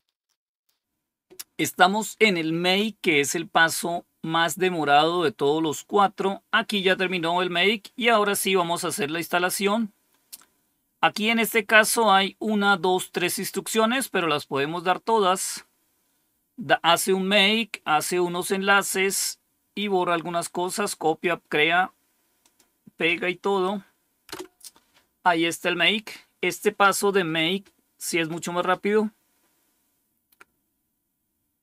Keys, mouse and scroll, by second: 0.5 scroll down 1, 9.5-11.9 drag, 14.4 right click, 15.4 click, 20.9 right click, 22.3 click, 24.2 Return.